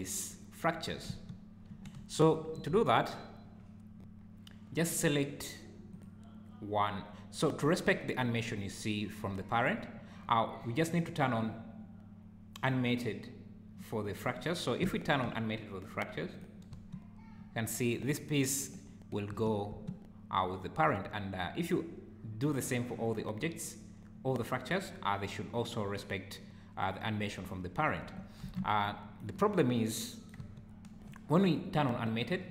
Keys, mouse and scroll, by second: 1.1 space, 1.7 Escape, 2.9 shift+right click, 5.9 click, 14.9 shift+right click, 16.3 click, 16.7 space, 19.3 space, 19.7 space, 28.0 Escape, 28.8 shift+right click, 29.7-30.0 scroll up 2, 30.4 space, 31.0 Escape.